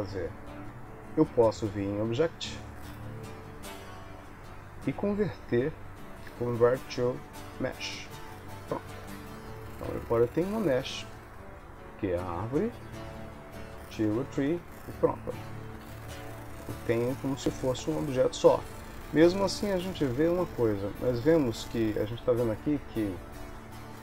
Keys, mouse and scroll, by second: 2.3 click, 11.5 g, 13.8 click, 14.8 click, 15.9 shift+d, 17.9 click, 18.6 shift+d, 20.0 s, 21.0 g, 23.9 r.